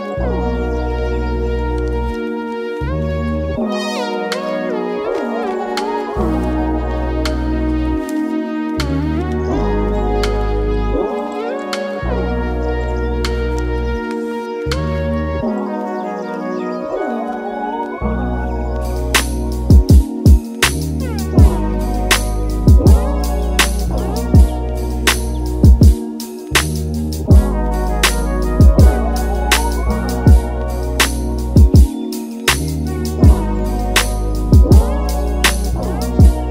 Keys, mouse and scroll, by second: 3.9-5.5 drag, 9.9 click, 13.2-15.6 drag, 15.6-17.2 middle drag, 17.2 ctrl+s, 18.0-24.2 drag, 27.8-28.1 shift+middle drag, 28.1-28.7 scroll up 5, 28.7-34.9 middle drag, 34.9-36.5 drag.